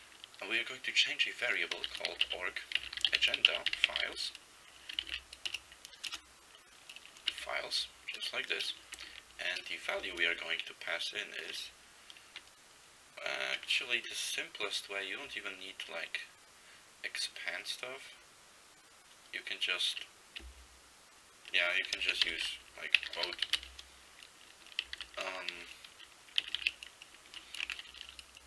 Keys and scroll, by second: 0.0-0.1 typing, 1.6-4.6 typing, 5.1 ctrl+n, 5.5 Return, 6.1 BackSpace, 7.3 Left, 7.4 s, 7.8 Right, 8.9 Left, 10.1 typing, 22.3-24.0 typing, 25.1 typing, 26.5 typing, 27.4 Left, 28.0 \.